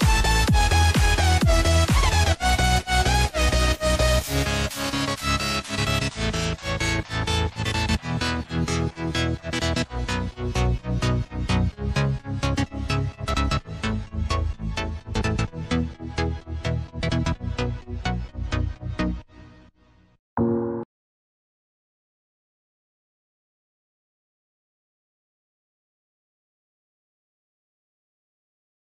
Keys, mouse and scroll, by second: 1.0 click, 4.1 click, 4.6 Tab, 5.2 click, 6.6 shift+click, 7.4 shift+click, 7.9 shift+click, 8.5 shift+click, 9.1 shift+click, 10.3 ctrl+b, 12.0 Tab, 14.9 shift+d, 21.8 ctrl+z, 23.6-24.0 scroll down 1, 25.3 click, 25.9 click, 26.4 shift+a.